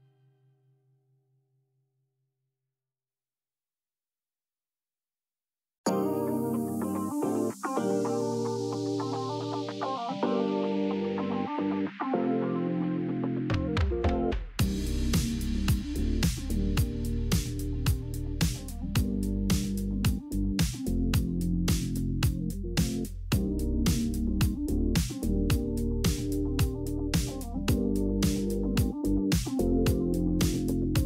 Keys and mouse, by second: 1.8 2, 3.1 f, 3.8 middle click, 4.7 middle click, 6.3-8.2 drag, 9.9 a, 11.1 shift+n, 12.0 Tab, 13.1 middle click, 15.0-16.5 drag, 16.5 Tab, 16.9 middle click, 17.7 middle click, 18.5 Tab, 20.0 click, 21.5 KP_3, 22.1 KP_Decimal, 22.6 KP_Decimal, 23.7-24.8 middle drag, 24.9 alt+z, 25.9 Tab, 26.7 alt+z, 27.7 1, 28.3 KP_3, 28.6 alt+z, 30.5 click.